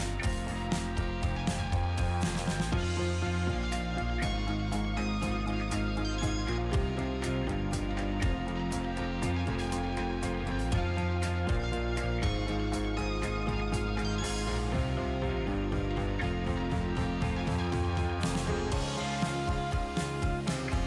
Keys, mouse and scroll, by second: 6.1-8.6 drag, 10.3 click, 13.3-14.5 drag, 14.5-15.0 scroll up 5.